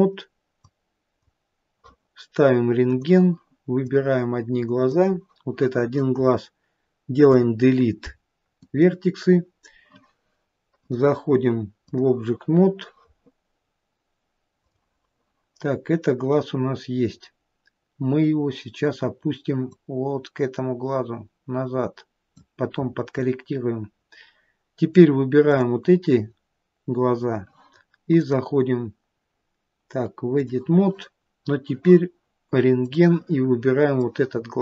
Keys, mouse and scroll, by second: 0.9 click, 4.1 click, 7.6 Delete, 11.2 click, 15.0 click, 17.2-17.9 scroll down 2, 18.6-19.0 scroll down 2, 20.0 click, 20.0-21.7 scroll down 1, 23.1-25.4 scroll up 2, 25.7 click, 25.7-26.5 scroll up 4, 27.3-28.4 scroll down 1, 28.4 click, 33.2 click, 34.2 click.